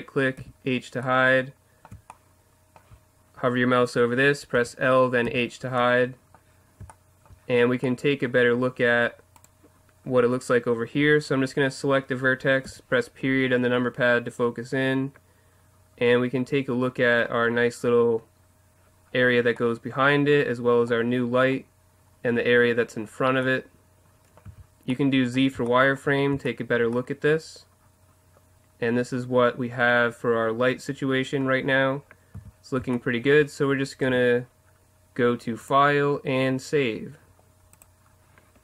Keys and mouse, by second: 0.4 h, 4.6 l, 5.2 h, 9.4-11.3 right drag, 12.6 KP_Decimal, 24.2 middle click, 24.3 middle click, 24.5 z, 28.2 middle click, 28.9 middle click, 32.3 z, 34.1 Tab, 35.6-37.3 drag.